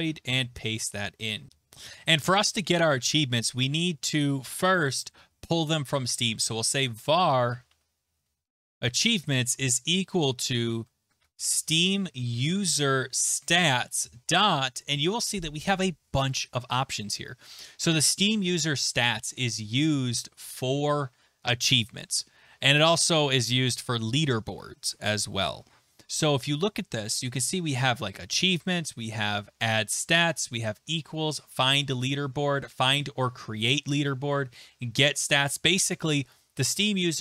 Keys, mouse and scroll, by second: 0.0-1.5 typing, 6.0-9.5 typing, 10.9-14.5 typing, 16.3-17.7 scroll, 19.4-20.0 scroll, 24.8 scroll, 35.3-36.1 scroll.